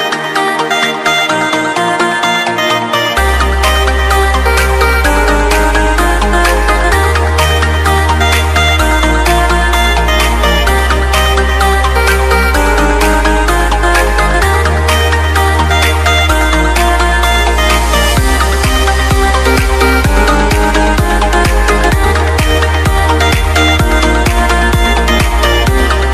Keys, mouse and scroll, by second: 1.1-1.6 scroll down 1, 1.6 click, 4.7-8.4 typing, 8.8 click, 16.3-17.3 scroll up 1, 17.3 click, 18.7 click, 24.4 click.